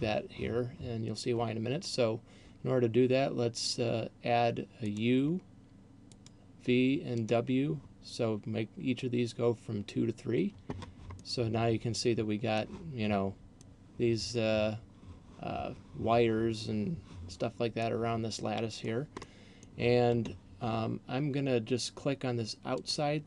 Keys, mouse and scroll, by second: 5.0 click, 6.3 click, 7.3 click, 11.3 middle click, 13.3 middle click, 17.8 middle click, 19.0 middle click, 22.8 click.